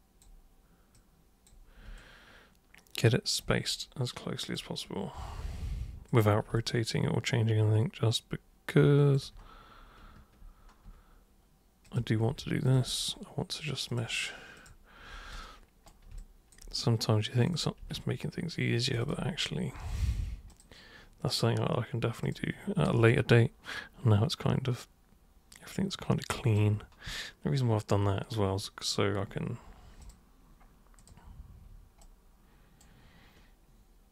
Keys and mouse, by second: 0.9 super+click, 1.9-3.4 alt+super+drag, 4.5 super+click, 6.1 super+click, 6.5-9.1 alt+drag, 11.8 click, 12.6 ctrl+shift+click, 13.8 click, 14.5 super+click, 15.3 super+right click, 16.2 alt+super+drag, 17.4 super+click, 17.5 super+click, 18.8 ctrl+shift+super+click, 19.0 ctrl+shift+super+click, 20.5 super+click, 22.2 super+click, 23.1-26.6 alt+super+drag, 30.0 super+click, 30.9 super+click, 32.0 super+right click.